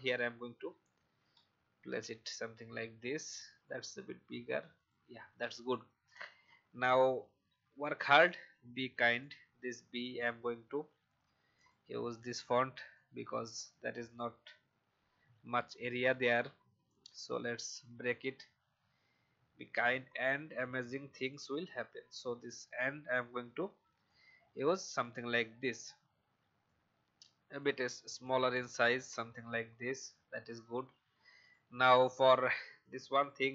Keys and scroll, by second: 0.0 Right, 0.2 Right, 0.4 Right, 0.6 Right, 0.8 Right, 1.3 Right, 2.0 Right, 11.9 v, 12.5 shift+v, 29.4 alt+shift+Down.